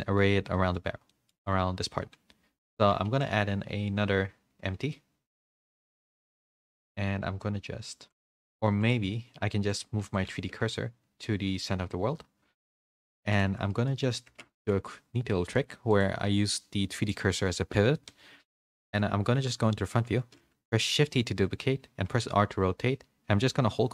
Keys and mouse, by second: 0.5 middle click, 1.1 middle click, 3.0 shift+a, 5.7 g, 8.6 x, 10.1 click, 10.3 shift+s, 13.3 click, 14.3 Tab, 14.6 a, 16.0-17.1 drag, 18.8 KP_1, 20.2 z, 21.0 shift+d.